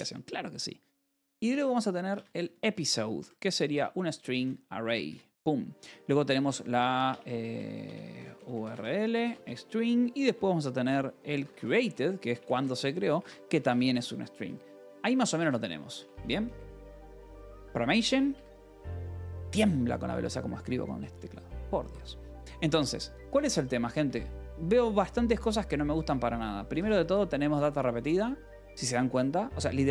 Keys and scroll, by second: 0.6-4.7 typing, 5.0 Return, 6.0-9.7 typing, 10.8-17.1 typing, 17.3 Escape, 18.3 Escape, 18.5 k, 20.1 a, 23.9 Escape, 26.0 1, 26.3 j, 26.8 j.